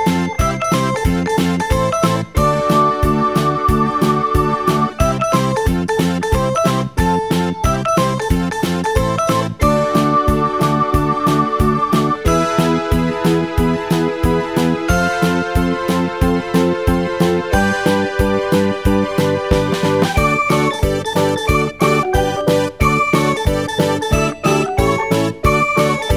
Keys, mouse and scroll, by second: 1.4-2.1 scroll down 1, 2.1-5.1 middle drag, 6.5 click, 8.0-11.6 drag, 11.6 KP_0, 14.1-17.1 middle drag.